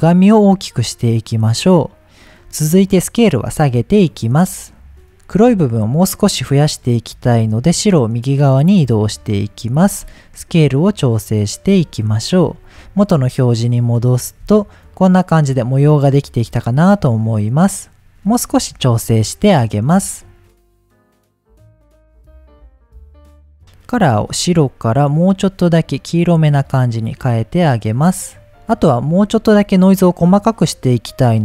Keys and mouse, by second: 3.0-5.0 drag, 6.7-9.1 drag, 12.8 middle click, 14.0 ctrl+shift+click, 16.9-18.1 drag, 19.6 click, 21.7 click, 22.2 shift+click, 22.9 click, 23.8 click.